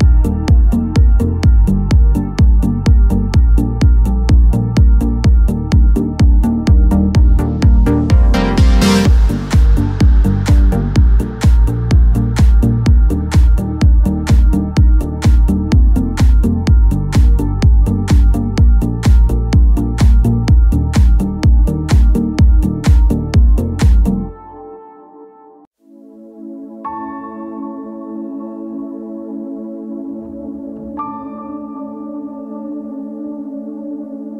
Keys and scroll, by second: 23.6 alt+shift+a, 25.3 r, 25.8 alt+r, 28.1-29.2 typing, 33.2 super+k.